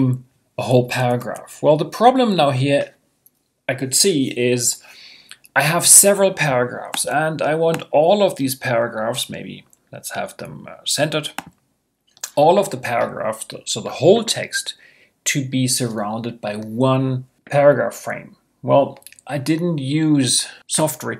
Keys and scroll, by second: 1.1 super+i.